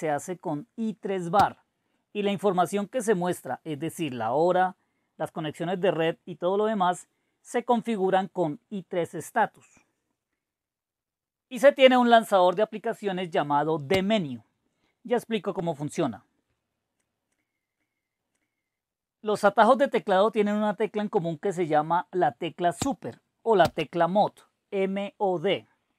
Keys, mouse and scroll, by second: 1.3 typing, 10.2 typing, 16.6-19.9 drag.